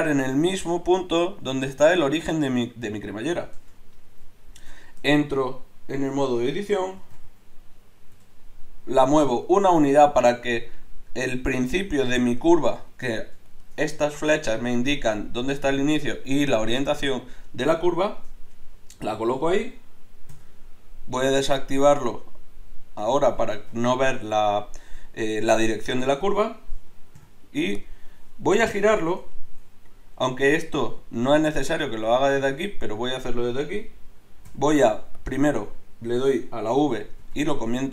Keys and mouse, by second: 3.6 Tab, 7.0 g, 13.1-20.3 drag, 20.3 n, 21.8-26.7 drag, 23.6 n, 27.2 ., 34.5 v, 37.3 v.